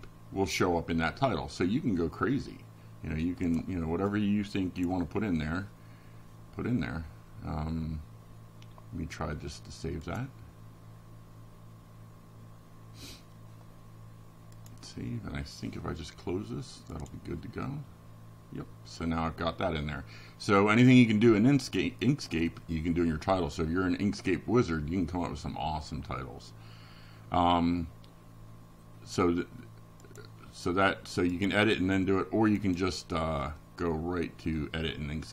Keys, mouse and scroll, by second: 1.2 click, 11.5 click, 11.8-14.2 middle drag.